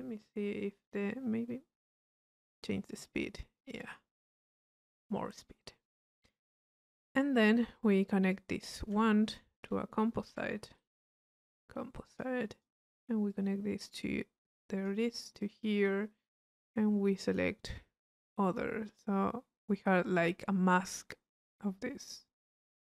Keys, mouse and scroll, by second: 2.1 click, 8.3-10.0 drag, 10.3 c, 12.1 click, 13.3-15.9 drag, 17.3 click, 18.1 click, 18.7 middle click.